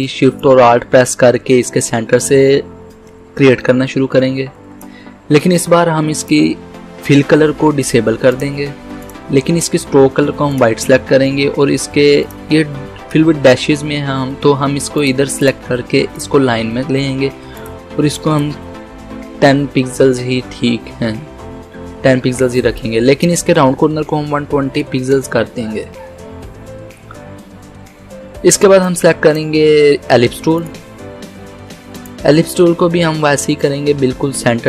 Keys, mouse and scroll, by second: 0.4-6.3 drag, 15.0 click, 18.7-19.6 typing, 22.8-24.2 drag, 23.9-24.9 typing, 25.2 Return, 28.9-30.7 drag.